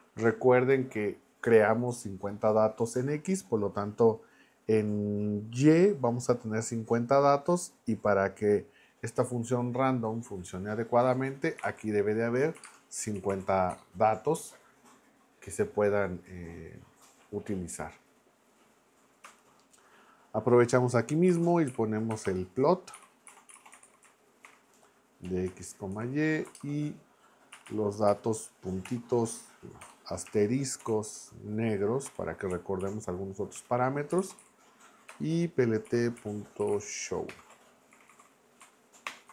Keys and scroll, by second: 11.3-13.8 typing, 19.2 Return, 21.0-27.5 typing, 28.1 Left, 28.8 ., 29.8 BackSpace, 30.8 shift+8, 32.1 k, 32.5 Right, 33.5 Return, 33.9-38.6 typing, 37.3 Return, 39.1 ctrl+Return.